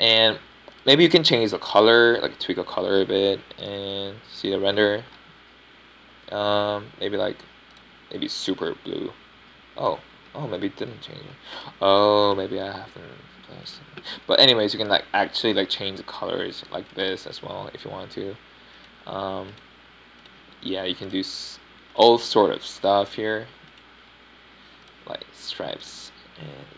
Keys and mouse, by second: 2.7-4.4 middle drag, 5.7 drag, 6.4 drag, 9.7 drag, 10.4 click, 10.5 click, 12.3-13.1 middle drag, 13.2 middle click, 13.4 middle click, 23.0-25.9 middle drag.